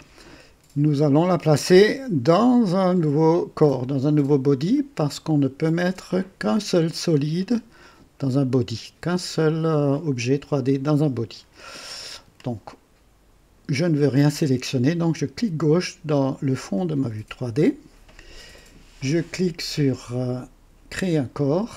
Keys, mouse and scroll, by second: 16.6 click, 20.8 click.